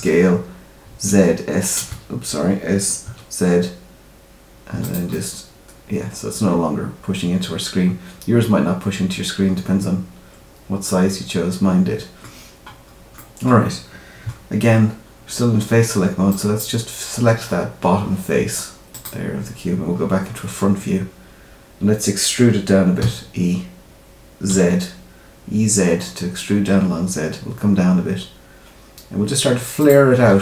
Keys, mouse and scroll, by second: 5.1 middle click, 13.1 middle click, 16.2 click, 18.9 click, 19.9-20.2 scroll down 2, 22.0 scroll down 1.